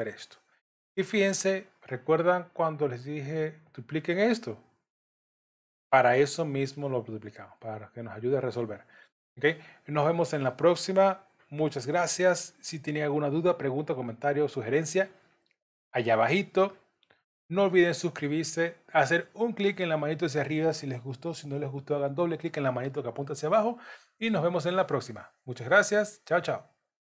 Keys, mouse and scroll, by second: 3.9 click, 8.2 click, 9.2-9.7 scroll down 1.